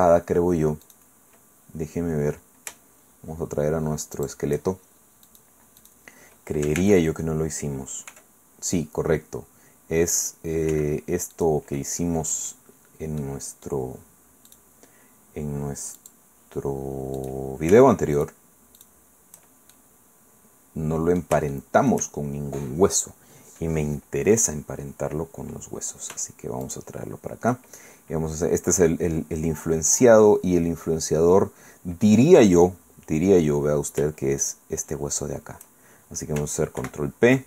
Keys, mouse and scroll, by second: 0.1 shift+scroll up 2, 0.8 click, 1.4-2.0 scroll down 2, 4.2 shift+middle click, 5.3 middle click, 5.8 middle click, 6.8 ctrl+Tab, 8.1 r, 10.7 Escape, 11.3 click, 11.8-13.9 middle drag, 14.5 click, 16.0 click, 17.2 click, 17.5 middle click, 18.2 shift+middle click, 18.8 shift+middle click, 19.7-22.1 shift+middle drag, 26.6 shift+click, 34.4 shift+right click, 36.8 ctrl+p.